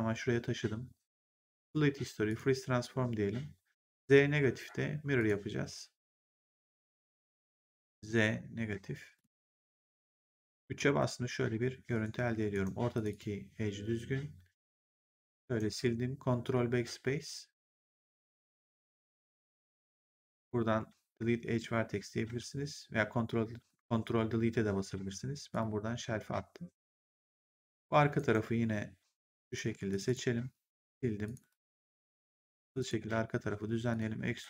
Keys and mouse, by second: 1.5 click, 5.1 click, 6.5 click, 7.6 click, 9.1 click, 10.2 right click, 10.6 3, 10.9 click, 12.2 1, 12.4 right click, 12.9 click, 14.7 click, 15.3 right click, 17.7 click, 25.4 click, 28.1 right click, 29.4 click, 29.8 shift+click, 30.7 Delete, 31.1 click, 31.5 Delete, 31.9 right click, 32.5 click, 33.8 click, 34.2 r.